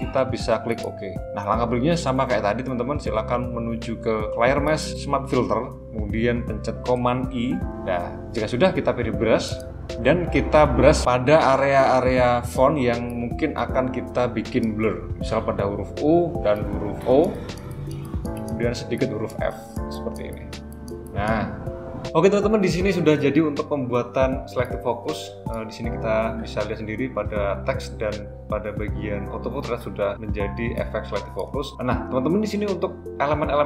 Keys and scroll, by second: 6.8 super+i.